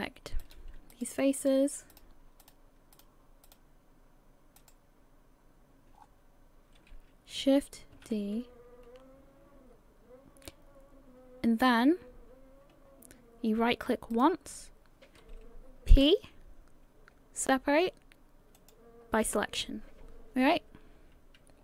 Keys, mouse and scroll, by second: 0.4 right click, 0.5 scroll up 4, 0.9 shift+right click, 1.5 shift+right click, 3.0 shift+right click, 5.9 shift+right click, 6.0-7.4 scroll down 5, 8.0 shift+d, 18.7 p.